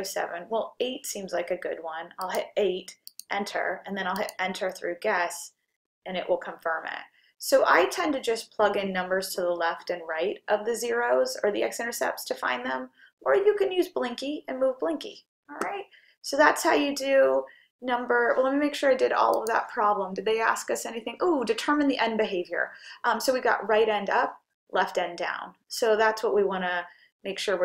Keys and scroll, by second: 2.3 8, 3.1 Return, 4.2 Return.